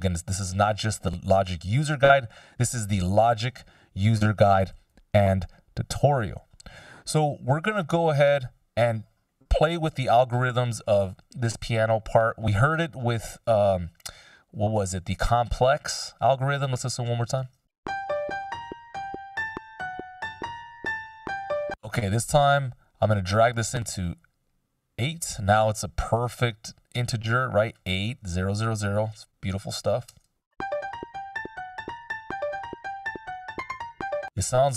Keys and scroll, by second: 1.6 F16, 9.8 Delete, 17.7 shift+space, 21.4 space, 30.2 space, 33.7 space.